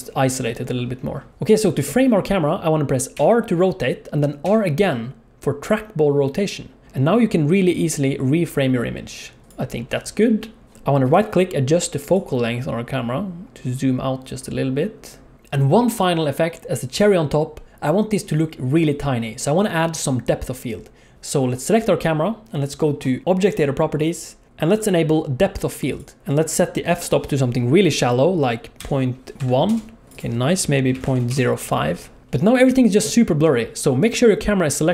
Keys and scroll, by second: 3.1 r, 15.3 alt+a, 15.3 ctrl+s.